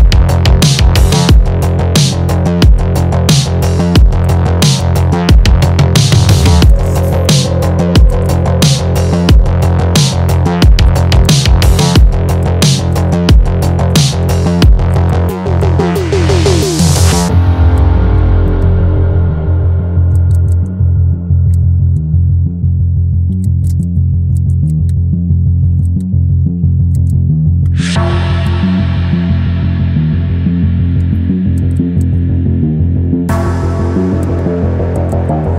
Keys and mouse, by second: 1.1 space, 1.2 click, 1.2 space, 1.4-2.9 drag, 2.9 space, 3.0-4.2 drag, 4.2 space, 4.3 click, 4.8 space, 4.8 click, 4.9 space, 5.0-6.6 drag, 6.7 ctrl+space, 6.7 ctrl+click, 6.8 ctrl+space, 6.9 click, 7.1 ctrl+space, 7.1 ctrl+click, 7.2 ctrl+space, 7.3 click, 8.0 ctrl+space, 8.2 ctrl+click, 10.0 click, 10.9 ctrl+space, 11.0 ctrl+click, 11.0 ctrl+space, 11.3 ctrl+click, 11.3 ctrl+space, 11.8 click, 12.4 ctrl+space, 12.5 ctrl+click, 12.5 ctrl+space, 13.0 ctrl+click, 13.7 ctrl+space, 13.7 ctrl+click, 13.8 ctrl+space, 14.0 ctrl+click, 14.1 ctrl+space, 14.3 click, 14.9 ctrl+space, 15.0 ctrl+click, 15.2 click, 15.4 click, 15.4 space, 15.7 ctrl+click, 16.1 click, 16.7 ctrl+space, 16.8 ctrl+click, 16.8 ctrl+space, 17.1 click, 17.8 ctrl+click, 17.9 ctrl+space, 18.2-20.1 drag, 20.1 ctrl+space, 20.2 ctrl+click, 20.5 ctrl+space, 20.6 ctrl+click, 21.5 ctrl+space, 21.6 ctrl+click, 21.6 ctrl+space, 22.1-23.4 drag, 23.4 ctrl+space, 23.8 ctrl+space, 23.9 ctrl+click, 23.9 ctrl+space, 24.0 click, 24.4 ctrl+space, 24.4 ctrl+click, 24.5 ctrl+space, 24.6 click, 24.7 ctrl+click, 24.8 ctrl+space, 24.9 click, 25.8 ctrl+space, 26.1 click, 26.9 ctrl+space, 27.0 ctrl+click, 27.0 ctrl+space, 27.2 click, 28.5 space, 28.5 click, 28.6 space, 28.7 click, 29.5-31.6 drag, 31.6 space, 31.6 click, 31.7 space, 31.8 ctrl+click, 32.0 click, 32.1 space, 32.3-34.2 ctrl+drag, 34.2 space, 34.3 click, 34.3 space, 34.5 click, 35.0 ctrl+space, 35.0 ctrl+click, 35.3 ctrl+space, 35.4 ctrl+click, 35.4 ctrl+space.